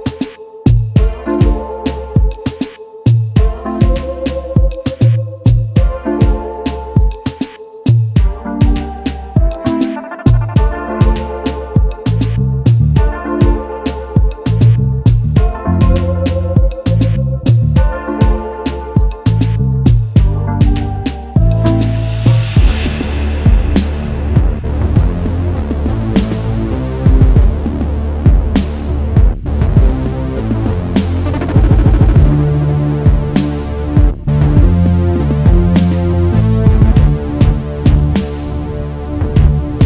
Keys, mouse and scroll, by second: 5.9-6.2 alt+scroll down 1, 6.2 space, 6.7 shift+click, 9.0 double click, 14.7 Up, 14.8 Up, 15.0 Up, 15.2 Up, 16.5 alt+scroll down 1, 17.0 space, 20.8-21.5 typing, 22.6-23.0 alt+scroll up 1, 24.4 shift+click, 26.1 double click, 27.4 Up, 27.6 Up, 27.9 Up, 28.6 space, 30.1 shift+click, 32.3 double click, 32.8 alt+scroll down 1, 33.4 space, 34.7 alt+scroll up 1, 35.7 double click, 36.1 space, 36.8 \.